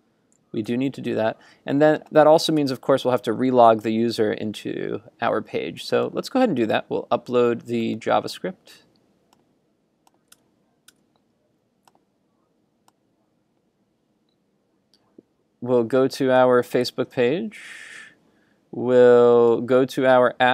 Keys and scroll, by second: 0.7 super+s, 2.7 super+Tab, 10.4 super+Tab, 16.4 super+t.